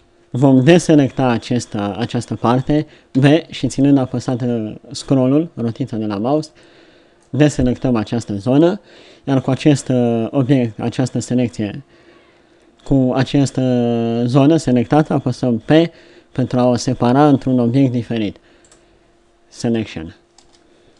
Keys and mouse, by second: 0.8 b, 3.1 b, 15.6 p, 20.4 Tab.